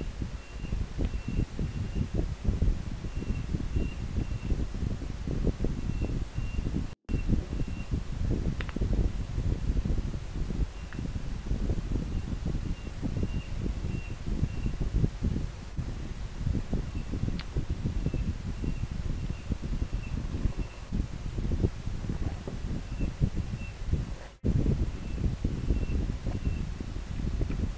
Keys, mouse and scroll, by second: 2.2 scroll up 1, 27.2 scroll down 1.